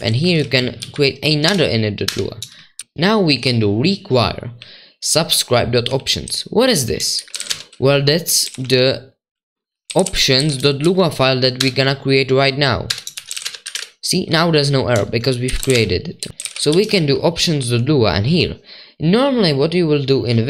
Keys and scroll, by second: 0.0-3.3 typing, 4.3-11.6 typing, 12.9-14.1 typing, 15.2-17.7 typing.